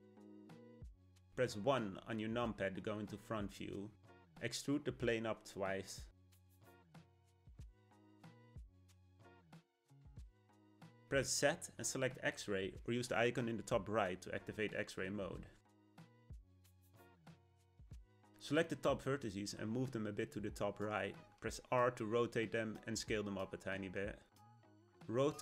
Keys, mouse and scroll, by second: 0.6-1.9 shift+middle drag, 1.9 KP_1, 5.0 e, 8.0 e, 13.3 z, 16.0 click, 17.2 click, 19.6 g, 22.2 r, 23.9 s.